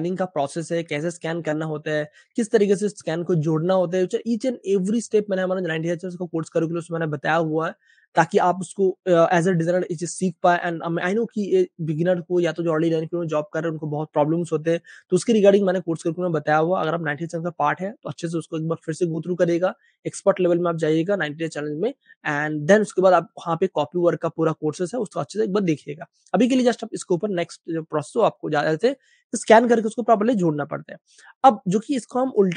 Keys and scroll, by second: 29.0 Page_Down, 32.4 space.